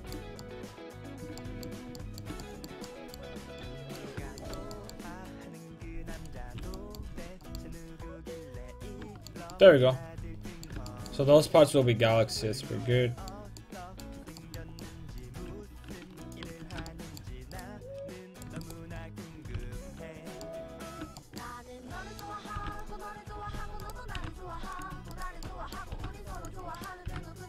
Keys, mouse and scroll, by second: 5.5-10.1 drag, 7.2 a, 10.1 middle click, 15.7 ctrl+Tab, 16.5 Tab, 17.6 click, 18.5 Tab, 18.7-20.7 drag, 19.6 g, 20.3 right click, 22.6-26.0 typing, 23.9 click, 24.8 click, 25.5 right click, 26.4 click, 27.1 g.